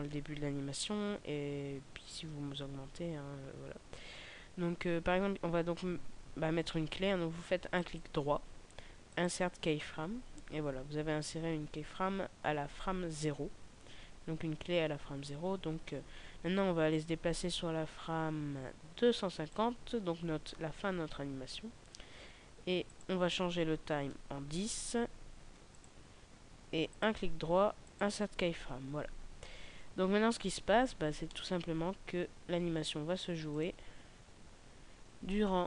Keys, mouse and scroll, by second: 7.6 right click, 16.9 click, 22.8 click, 26.8 right click, 30.8-31.2 scroll down 1, 31.2 middle click, 33.4 click.